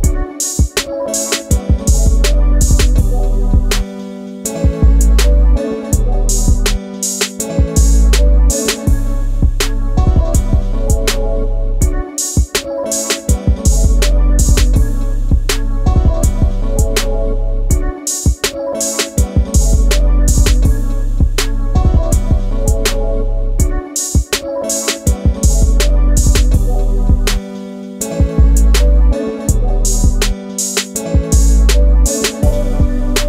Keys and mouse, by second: 3.0 click, 6.1-6.4 drag, 11.3 a, 13.8 h, 14.8 click, 15.4 Tab, 16.1-19.3 drag, 19.9 KP_7, 20.8-22.6 drag, 24.2 click, 25.5 click, 26.8-28.0 drag, 28.3 click, 29.7 g, 31.2 click, 32.1-33.2 drag.